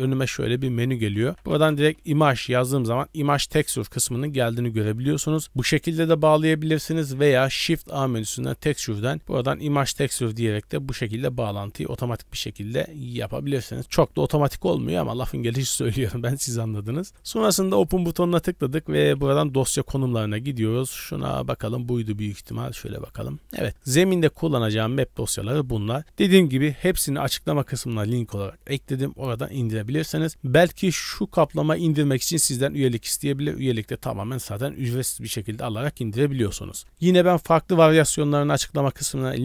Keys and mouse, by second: 6.2 click, 6.6 x, 7.4 shift+a, 11.0 drag, 12.2-13.3 drag, 17.2 click.